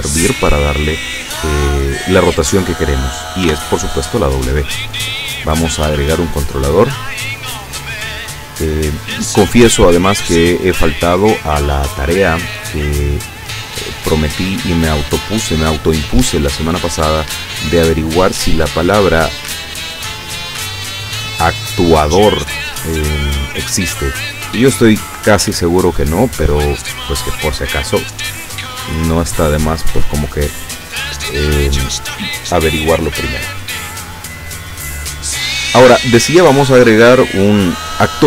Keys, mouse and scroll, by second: 3.5 w, 5.9 click, 7.3 click, 11.1-12.4 drag, 14.3-15.3 drag, 18.8 click, 20.4-21.4 drag, 37.3 click.